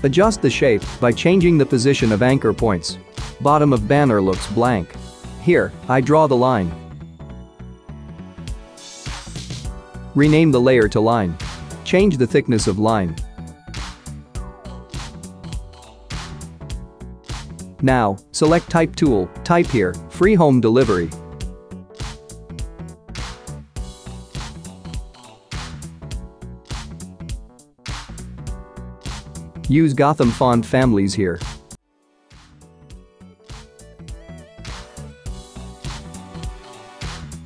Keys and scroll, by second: 2.6 v, 11.1-11.4 typing, 11.8 Return, 21.3 Caps_Lock, 21.4-23.6 typing.